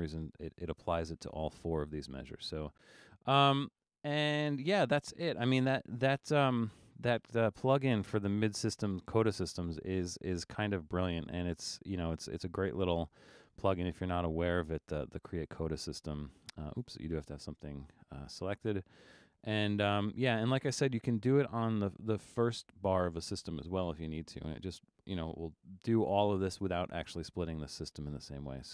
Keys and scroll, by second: 5.9 super+-, 6.8 super+-.